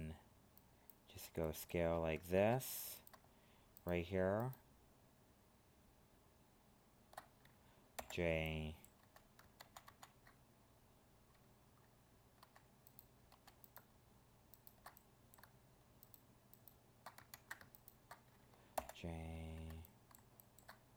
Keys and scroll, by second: 2.3 ctrl+Tab, 9.5 ctrl+z, 17.3 ctrl+z.